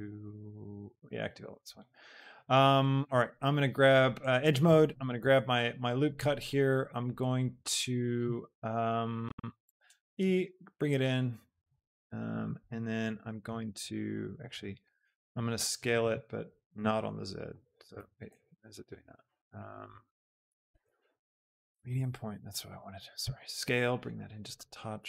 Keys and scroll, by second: 9.5 e, 9.9 Escape, 10.3 s, 14.7 ctrl+z, 15.0 d, 15.8 s, 16.5 shift+z, 18.0 z, 23.1 s.